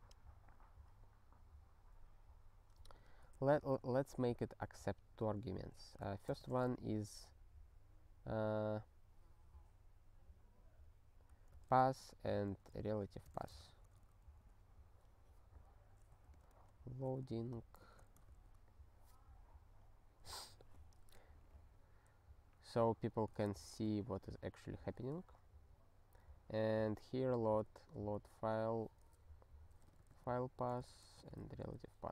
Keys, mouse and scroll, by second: 3.3 ctrl+p, 3.8 ctrl+b, 5.7 space, 6.2 BackSpace, 11.5-13.8 typing, 14.1 ctrl+n, 16.2 alt+f, 16.4 alt+f, 17.1 ctrl+f, 17.2 ctrl+f, 17.8 ctrl+d, 18.0 p, 18.4 ctrl+s, 23.4 ctrl+f, 23.8 Return, 28.5 click, 29.6-31.4 typing, 31.4 ctrl+s.